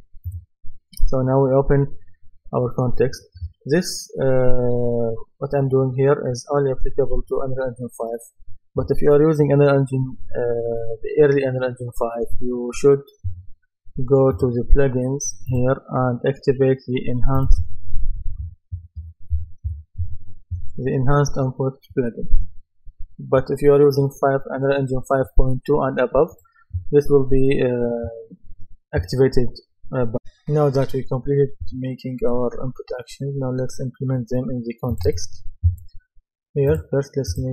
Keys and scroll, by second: 18.1-20.5 typing.